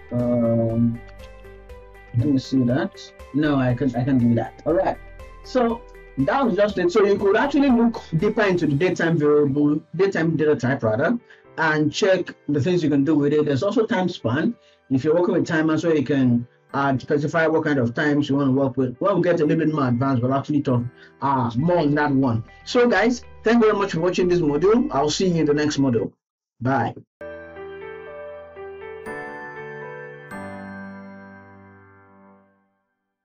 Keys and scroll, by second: 1.2 BackSpace, 7.3 ctrl+s.